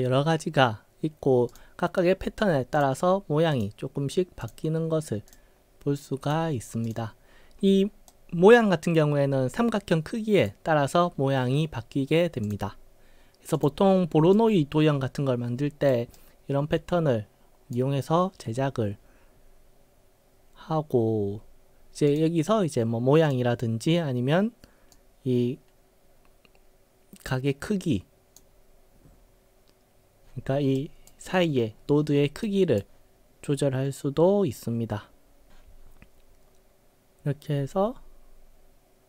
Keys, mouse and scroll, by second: 1.5 click, 2.8 click, 3.6 click, 4.5 click, 5.3 click, 6.3 click, 6.9 click, 8.1-10.4 right drag, 12.5 click, 13.6 click, 14.4-15.9 right drag, 16.2-17.8 right drag, 22.1 click, 23.3 click, 25.0-28.4 drag, 30.8 right click, 32.4 right click.